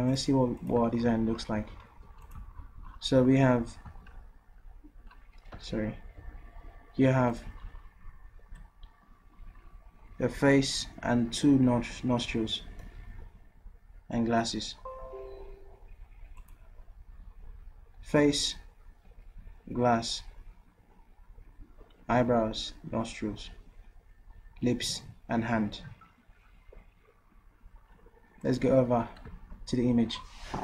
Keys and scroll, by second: 2.2 ctrl+v, 4.2 ctrl+z, 5.8 Delete, 6.2 typing, 9.2 typing.